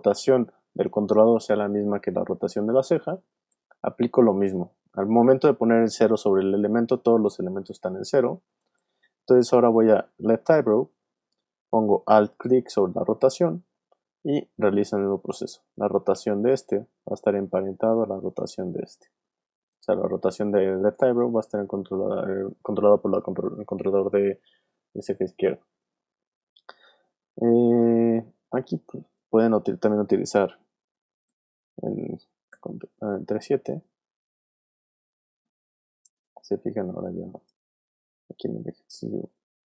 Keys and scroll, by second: 2.8 r, 31.2 shift+7, 32.5 shift+7, 38.8 w.